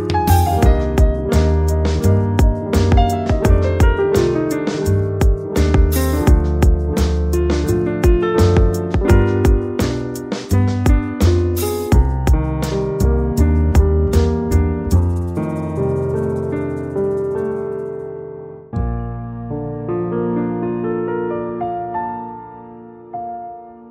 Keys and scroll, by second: 0.5 space, 4.2 space, 9.5 ctrl+j.